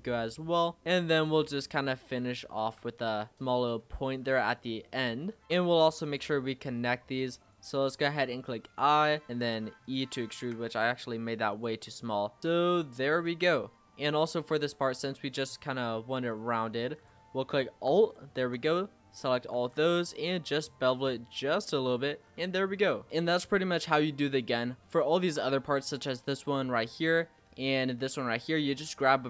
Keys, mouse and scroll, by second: 0.0-0.8 scroll up 2, 0.8 e, 1.4 s, 2.7 g, 4.0-4.9 scroll down 7, 4.3 Tab, 4.9 scroll up 2, 5.4 shift+middle click, 6.0 click, 7.4 click, 8.1 i, 9.2 e, 10.2 ctrl+z, 10.7 s, 11.7 e, 12.5 s, 13.5-14.8 middle drag, 14.8 z, 16.3 click, 18.0 alt+click, 19.5 ctrl+b, 21.6 Tab, 21.9 click, 22.2-22.6 scroll down 6, 22.6-23.0 middle drag, 24.3-26.3 shift+middle drag, 26.3 scroll up 3, 26.8-29.2 shift+middle drag.